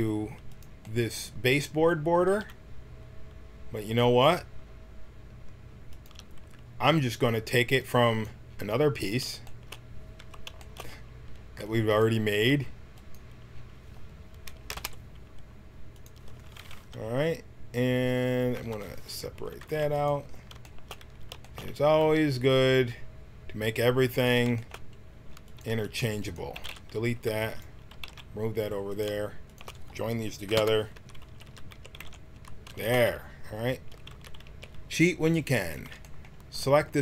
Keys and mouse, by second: 2.2 g, 7.8 right click, 8.7-10.2 middle drag, 10.2 Tab, 12.3 Tab, 14.7 shift+d, 18.5 p, 19.7 Tab, 20.0-21.9 drag, 22.0 g, 25.5-28.3 drag, 25.7 Tab, 26.5 x, 27.3 Tab, 27.9 g, 30.6 ctrl+j, 30.9 Tab, 31.3 a, 31.5 a, 31.7 a, 31.9 w, 32.4 Tab, 34.1 Tab, 34.4 a, 35.6-37.0 drag.